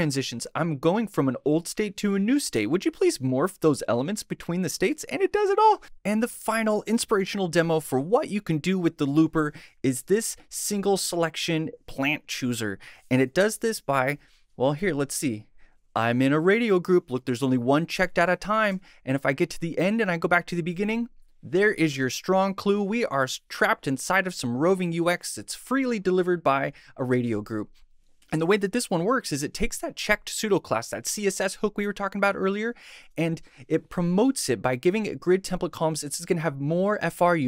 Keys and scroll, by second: 20.7 Right, 27.3 Right.